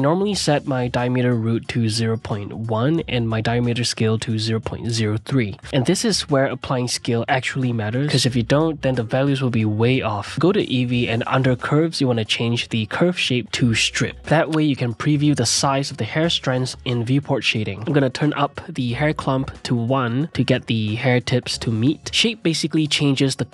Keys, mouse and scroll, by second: 3.9-6.2 drag, 6.2-7.1 middle drag, 7.1 click, 7.4-8.6 middle drag, 8.6-11.7 drag, 13.4-15.6 drag, 15.6-16.6 middle drag, 16.6 drag, 16.9 scroll up 1, 17.2-17.6 middle drag, 17.6-18.9 drag, 19.9-23.2 drag.